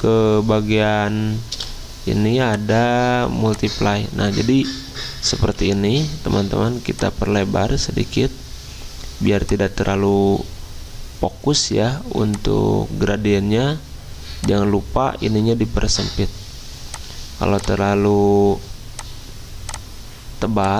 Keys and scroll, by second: 1.5 v, 5.5 g.